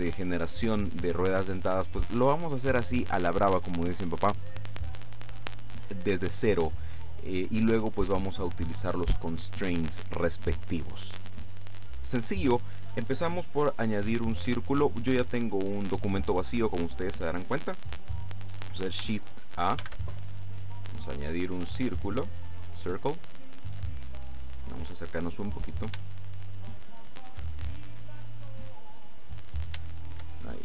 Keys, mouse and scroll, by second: 19.9 shift+a, 22.4 click, 24.7-26.0 scroll up 2, 26.0 shift+scroll up 1, 28.1-28.8 scroll down 2, 28.8-29.3 scroll up 2, 29.3 middle click, 29.9 shift+middle click, 30.4-30.6 shift+scroll up 3.